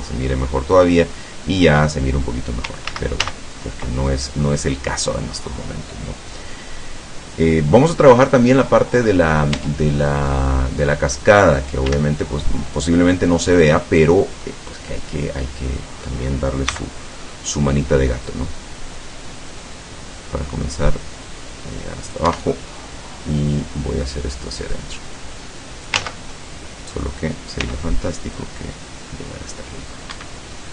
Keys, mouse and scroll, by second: 2.9 ctrl+z, 6.1 scroll up 1, 9.6 Tab, 10.1 middle click, 11.0-11.5 scroll up 1, 12.0 a, 12.3-14.6 middle drag, 15.0-16.3 middle drag, 16.8 c, 18.3-22.4 drag, 22.3 Escape, 22.6-23.6 middle drag, 24.8-26.2 drag, 26.1 ctrl+z, 26.4 ctrl+middle click, 27.6 c, 28.4-30.4 drag, 30.2 Escape, 30.6 middle click.